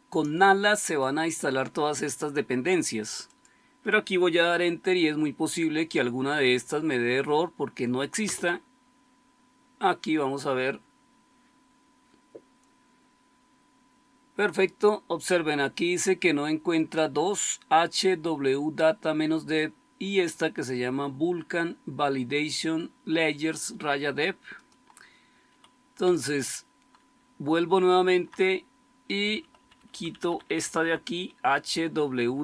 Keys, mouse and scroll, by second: 8.2 Return, 25.9 Up, 27.1-28.1 Left, 28.4 Left, 29.2 Right, 29.4 Right, 29.5 Right, 29.7 Right, 29.9 Right, 30.0 Right, 30.2 Right, 30.4 Right, 30.6 Right, 30.8 Right, 31.6 Delete, 31.8 Delete, 32.0 Delete, 32.2 Delete, 32.3 Delete.